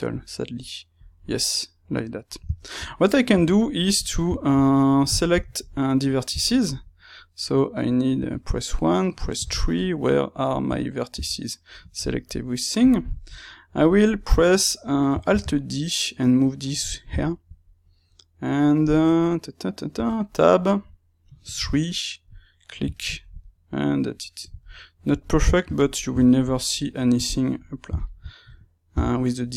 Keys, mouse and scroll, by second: 8.1 1, 10.6 a, 12.7-14.1 drag, 14.1-22.2 middle drag, 16.8 click, 22.2 click, 22.5-27.9 middle drag, 27.9 shift+click, 28.8 h.